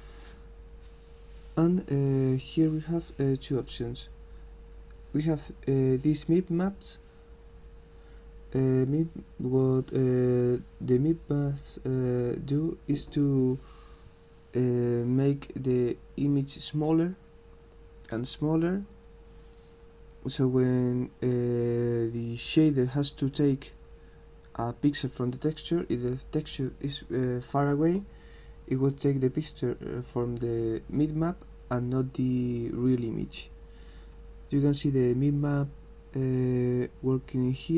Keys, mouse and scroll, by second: 34.2-37.7 drag.